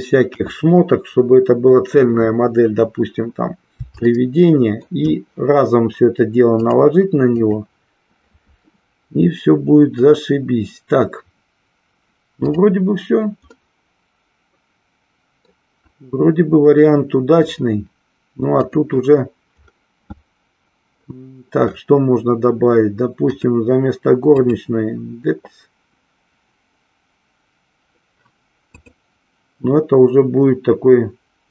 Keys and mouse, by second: 1.5 KP_1, 4.1-5.2 shift+middle drag, 6.6 click, 12.3-13.0 drag, 13.6-15.7 middle drag, 18.7 click, 23.3-24.7 drag, 28.7 click.